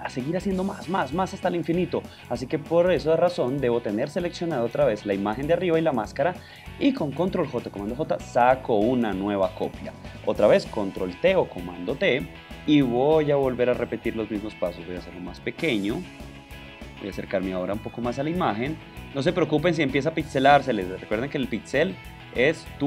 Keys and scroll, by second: 7.5 super+j, 11.4 super+t, 11.8 super+space, 12.4 shift+super+space, 22.6 shift+space.